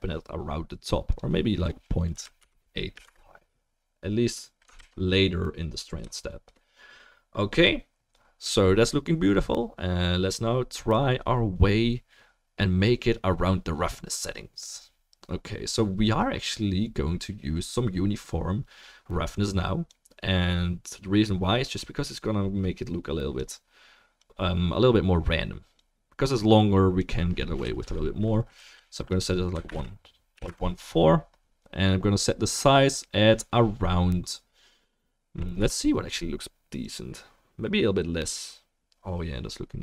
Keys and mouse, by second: 4.6 ctrl+click, 5.2 ctrl+s.